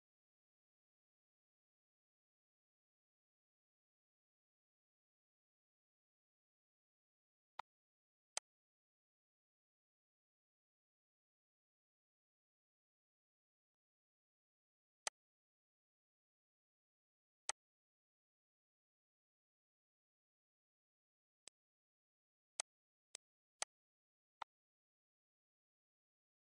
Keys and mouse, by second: 5.3 ctrl+d, 7.3 click, 8.1 ctrl+click, 13.5 shift+click, 14.8 click, 17.3 click, 20.7 ctrl+g, 21.2 shift+click, 22.3 click, 24.2 ctrl+click, 25.2 Delete, 26.3 click.